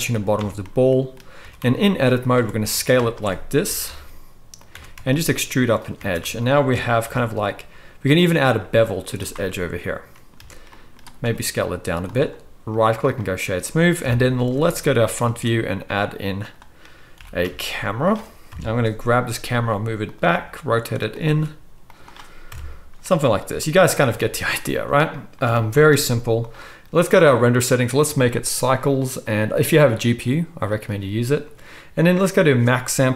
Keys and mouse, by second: 0.4 Tab, 0.9-3.4 middle drag, 1.4 s, 2.7 alt+a, 3.6 g, 4.7 e, 5.9 alt+a, 7.0 ctrl+b, 9.1-12.6 middle drag, 10.3 Tab, 11.2 s, 12.6-14.0 right drag, 14.0-15.1 drag, 14.0 KP_1, 15.1 right click, 15.2-16.5 shift+drag, 15.2 shift+a, 16.5 right click, 16.5-16.8 drag, 16.8 right click, 17.0-22.4 drag, 17.1 g, 18.5 KP_3, 19.3 g, 20.3 r, 21.2 s, 22.4-25.4 right drag, 22.4 KP_0, 24.0 r, 25.4-27.7 middle drag, 25.4 r, 27.7-33.1 drag.